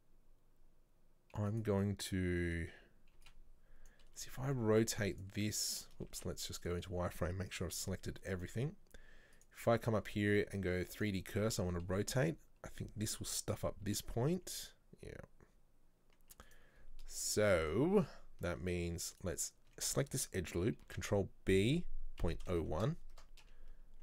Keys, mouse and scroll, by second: 1.5-3.9 right drag, 3.9 b, 11.0-13.9 drag, 13.9 r, 19.2-20.9 alt+right drag, 20.9 ctrl+b.